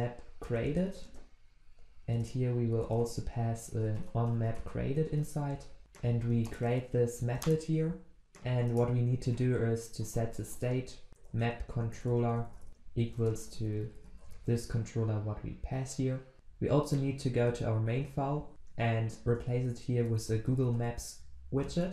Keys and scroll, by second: 6.5 alt+Return, 10.5 Return, 17.9 ctrl+w.